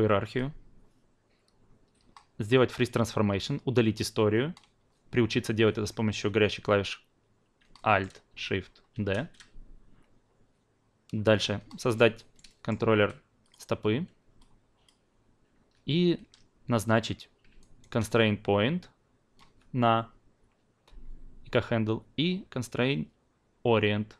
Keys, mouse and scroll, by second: 0.2-7.6 drag, 7.7 alt+middle click, 8.9 alt+shift+d, 11.7 alt+middle click, 12.2 alt+right drag, 12.5 alt+middle drag, 13.4 click, 14.8-15.7 alt+drag, 17.6-24.1 alt+right drag.